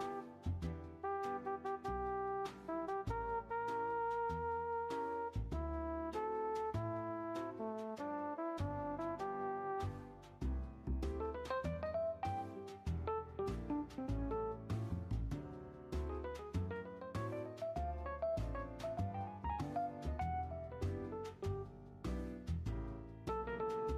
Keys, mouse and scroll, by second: 2.9-7.0 middle drag, 7.6-8.2 shift+middle drag, 8.2-14.2 drag, 14.2-14.8 middle drag, 14.8 r, 17.5 shift+middle drag, 17.8 scroll up 1, 18.0-19.2 middle drag, 19.2-23.9 drag.